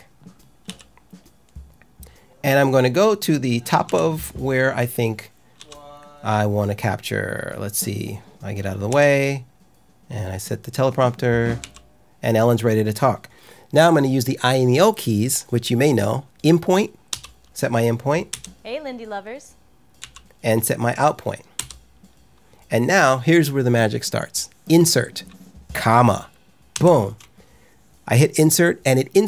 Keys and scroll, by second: 0.6 j, 3.8 k, 5.5 l, 8.8 l, 11.5 k, 17.0 i, 18.2 l, 19.9 k, 21.5 o, 26.7 ,.